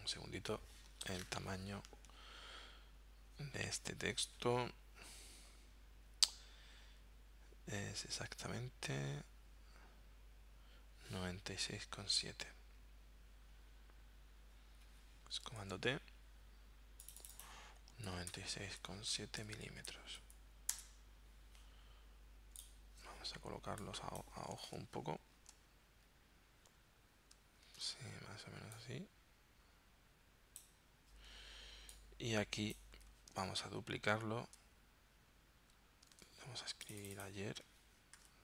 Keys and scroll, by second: 0.0 super+z, 15.6 super+t, 18.1-19.4 typing, 20.9 Return, 24.7 super+Tab, 27.7 super+Tab, 33.5 super+Tab, 36.2 super+Tab, 38.2-38.4 typing.